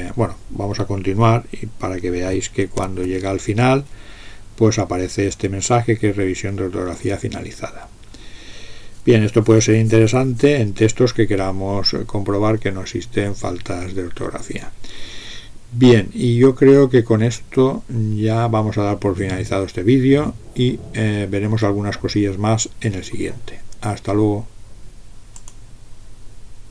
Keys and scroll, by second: 2.8 shift+i.